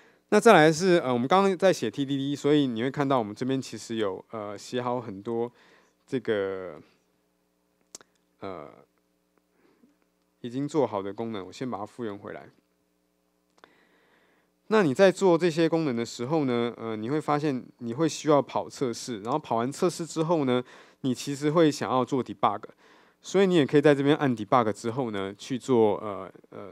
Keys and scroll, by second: 11.2 alt+super+z, 19.4 ctrl+shift+super+o.